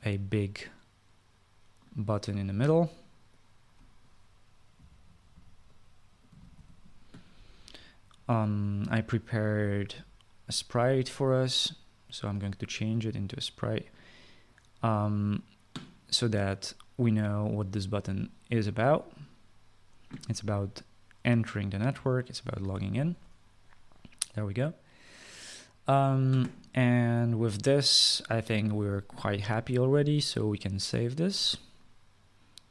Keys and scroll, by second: 5.4-7.7 typing, 23.4 Delete.